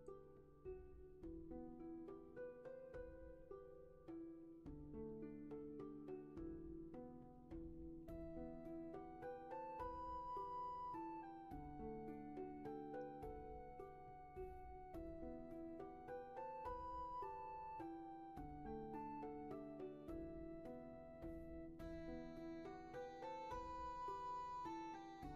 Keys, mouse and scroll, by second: 7.8 space, 8.5 scroll up 1, 8.7 space, 9.4 scroll up 1.